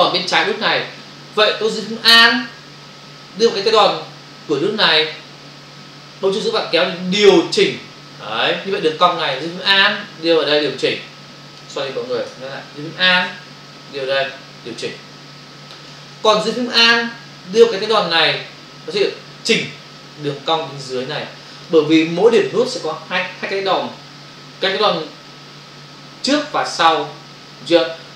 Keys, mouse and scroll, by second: 6.4 alt+click, 10.7 alt+click, 14.4 alt+click, 19.0 alt+click.